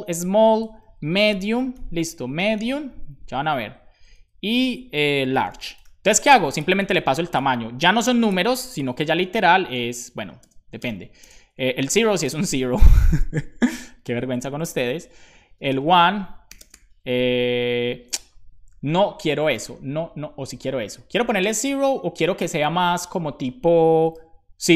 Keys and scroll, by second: 0.5 Left, 1.0-3.5 typing, 3.2 Right, 3.4 Right, 5.0-6.2 typing, 8.9 BackSpace, 10.2 ', 10.3 space, 10.6 ', 10.7 space, 14.3 Down, 14.3 Up, 14.6 Left, 15.2 Down, 16.7 ', 17.4 Right, 24.1 super+b.